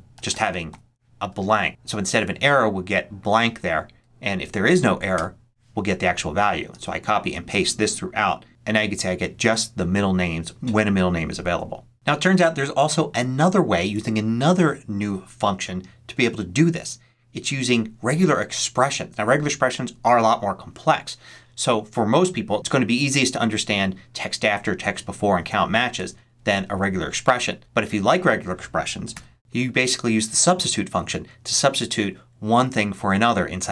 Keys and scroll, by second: 0.6 shift+0, 5.0 Return, 6.6 super+c, 7.4 super+v.